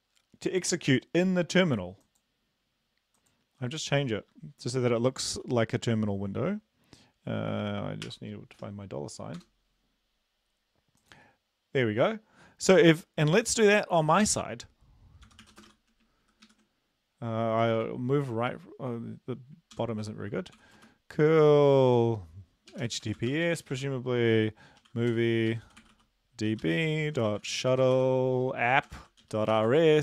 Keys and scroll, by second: 8.0-8.6 typing, 9.4 Return.